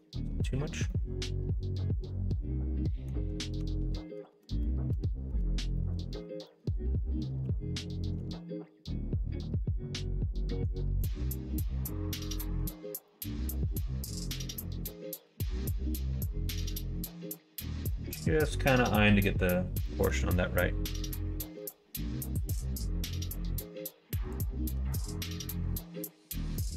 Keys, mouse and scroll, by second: 0.8-3.0 middle drag, 3.5 Tab, 4.3 ctrl+z, 4.5 ctrl+z, 4.9 ctrl+z, 5.3 ctrl+z, 5.7 middle click, 6.4 middle click, 7.4 r, 11.6 middle click, 13.0 middle click, 13.6 middle click, 14.8 s, 17.2-18.7 middle drag, 19.8 middle click, 21.6 click, 22.1 middle click, 23.2 b, 24.9 alt+z, 25.7-26.7 drag.